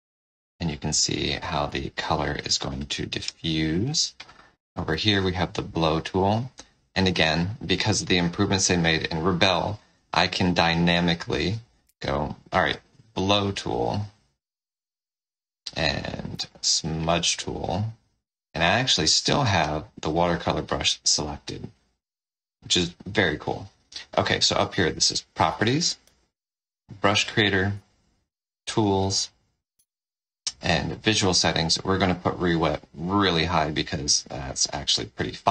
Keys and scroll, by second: 4.8 o, 7.1 o, 11.7 o, 14.5 o, 16.2 n, 19.0 n, 24.6 F4, 25.9 F5, 27.6 F3, 29.7 F12.